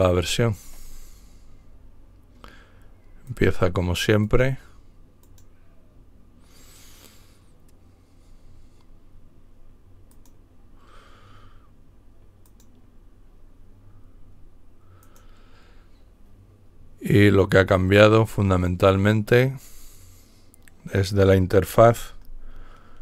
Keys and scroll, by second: 1.7 typing.